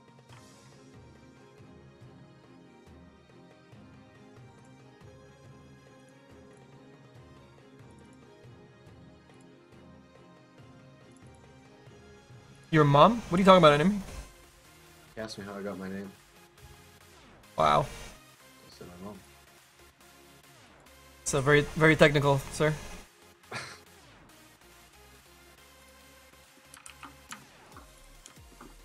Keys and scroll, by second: 26.1 ctrl+z.